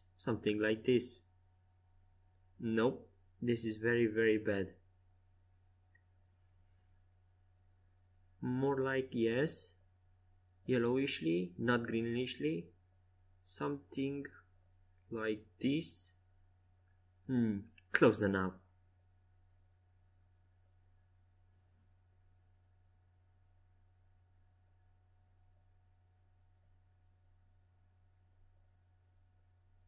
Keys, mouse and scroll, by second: 1.1-3.5 middle drag, 1.1 right click, 2.6 z, 3.5-5.8 drag, 5.6 middle click, 5.6 right click, 6.0-11.0 drag, 9.5-11.0 middle drag, 20.0-21.8 drag, 21.8 right click, 22.3 z, 23.5 middle click, 26.9 shift+a, 29.2 Tab.